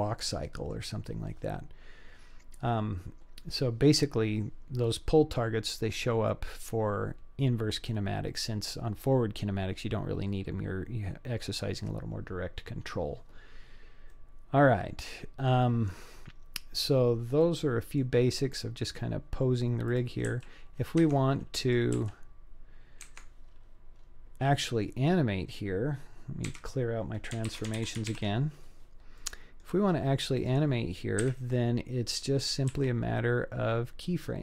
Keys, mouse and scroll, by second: 1.1-1.7 scroll down 2, 1.7 scroll down 1, 14.1-15.5 middle drag, 16.0-16.7 scroll up 4, 16.7-17.1 scroll down 3, 17.4-18.0 middle drag, 18.4-19.9 scroll up 2, 19.9 click, 20.3 g, 21.7 click, 22.0 g, 23.4-23.9 scroll down 4, 24.0-24.5 scroll up 3, 24.5-24.9 middle drag, 26.5 a, 27.5 alt+r, 27.8 alt+g, 28.2 alt+s, 29.2-29.6 middle drag, 30.4 click, 31.2 KP_1, 32.4-32.8 scroll down 2, 32.8 g.